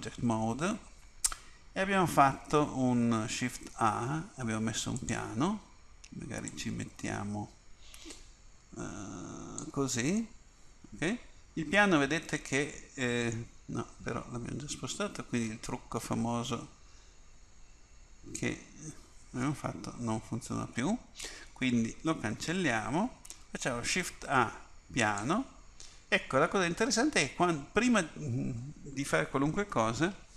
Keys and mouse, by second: 3.5 shift+a, 6.6-9.2 drag, 10.3 middle click, 15.0-16.8 drag, 21.3 Delete, 24.0 shift+a.